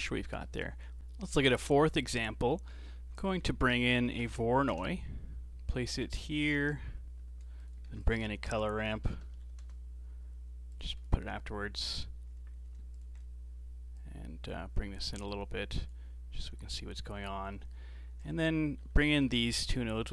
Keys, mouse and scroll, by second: 0.4 middle click, 1.0 x, 1.4-1.7 scroll down 2, 1.7 middle click, 2.1-2.5 scroll up 4, 2.5 middle click, 3.0 shift+a, 6.2 scroll up 2, 6.4 middle click, 7.2 g, 7.9 shift+a, 9.5 r, 11.0-13.0 alt+right drag, 13.0 ctrl+shift+click, 14.0-17.5 drag, 17.5 middle click, 18.2 click, 18.8 ctrl+t, 19.1 middle click, 19.6 click.